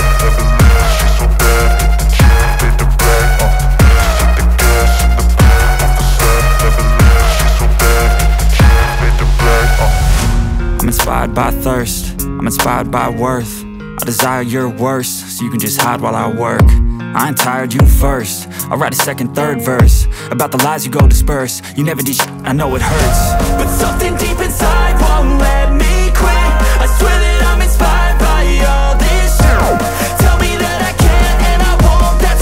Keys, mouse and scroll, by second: 9.2 space, 9.3 click, 10.4-12.7 alt+drag, 12.7 space, 13.7-16.0 alt+drag, 18.4 space, 18.4 click, 19.6-22.2 alt+drag, 22.3-22.8 alt+scroll down 1, 23.2 space, 23.4 click, 23.7-24.0 space, 24.1 click, 24.4-24.8 space, 24.8 click, 24.9-25.7 space, 26.0 alt+scroll up 1, 27.2-27.8 alt+right click, 27.9 alt+click, 28.7-30.2 drag, 30.4 alt+scroll down 1.